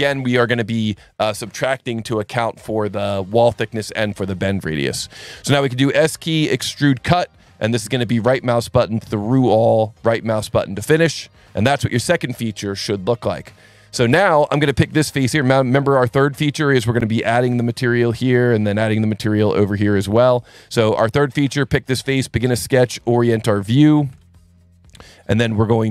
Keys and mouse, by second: 5.6 s, 7.0 click, 7.9 right click, 9.2 click, 10.9 right click, 11.4 click, 14.5 click, 15.4 click, 16.0 alt+1, 16.3 click, 17.0 click, 18.9 click, 20.4 alt+1, 21.3 click, 23.0 n, 24.1 ctrl+8, 25.8 ctrl+s.